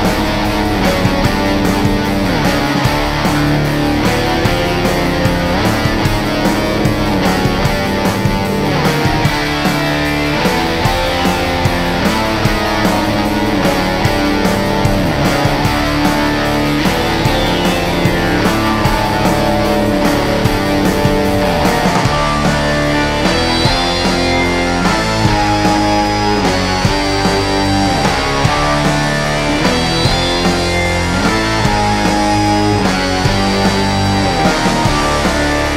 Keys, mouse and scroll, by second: 2.7-11.1 alt+drag, 14.8 ctrl+d, 19.4 ctrl+d, 21.1-23.6 drag, 24.1 right click, 25.5 click, 27.9-29.9 drag.